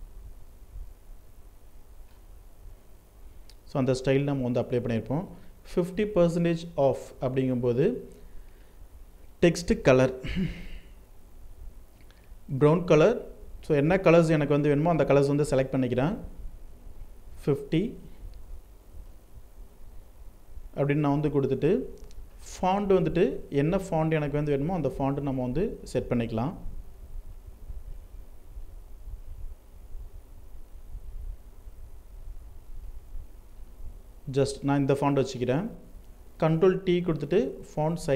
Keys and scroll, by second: 17.7 ctrl+Return, 35.4 ctrl+t.